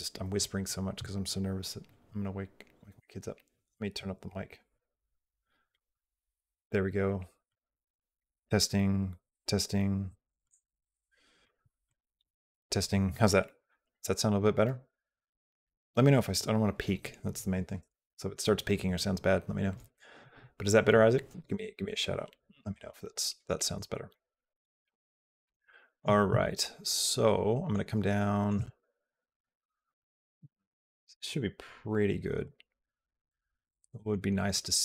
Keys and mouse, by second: 24.2-25.3 shift+middle drag, 25.5 shift+middle click, 26.3 shift+middle click, 27.0 shift+middle click, 27.9 shift+middle click, 28.6 shift+middle click, 29.3 shift+middle click, 32.3-33.9 shift+middle drag, 34.4-34.8 shift+middle drag.